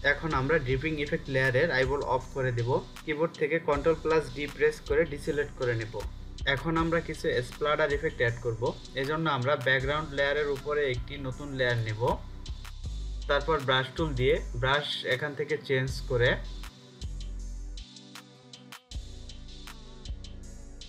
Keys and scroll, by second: 3.4 ctrl+d.